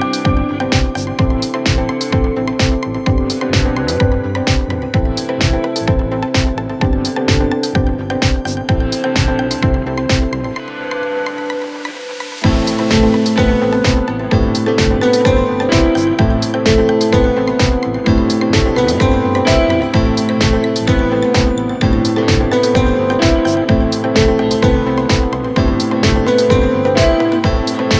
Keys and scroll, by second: 6.7 shift+Page_Down, 7.7 w, 9.9 f.